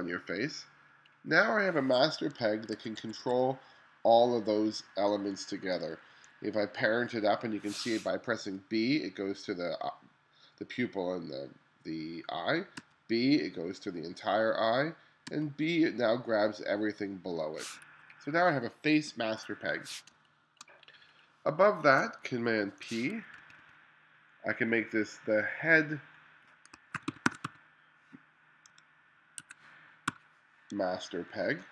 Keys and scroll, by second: 2.8 1, 6.2 2, 8.6 b, 12.8 b, 15.3 b, 20.2 space, 22.5 super+p, 23.5 2, 26.7-30.1 typing.